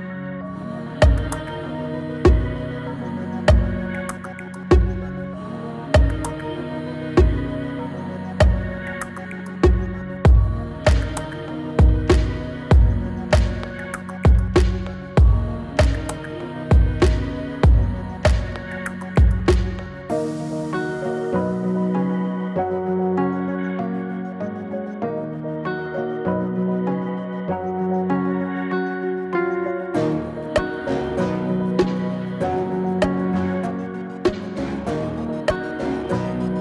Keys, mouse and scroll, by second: 5.7-10.4 drag, 12.7 Return, 14.4-16.5 click, 17.9-18.8 shift+drag, 20.6 Return, 24.4-28.2 drag, 29.5 right click, 30.3 click, 32.2 right click, 33.0-36.6 drag, 36.0-36.6 click.